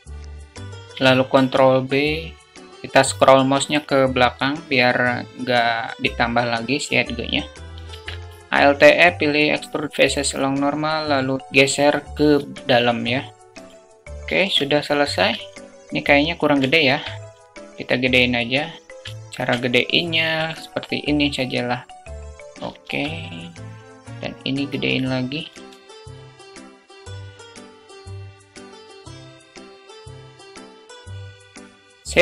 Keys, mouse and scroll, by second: 1.1 ctrl+b, 7.7 alt+e, 12.1 Tab, 15.6 ctrl+z, 15.6 Tab, 17.3 alt+shift+middle drag, 19.0 s, 19.0 `, 19.0 shift+middle click, 26.3 click, 26.7 ctrl+z, 26.8 `, 27.1 s, 27.9-28.5 drag, 29.3 click, 30.1 s, 31.0 click, 31.4-32.2 middle drag.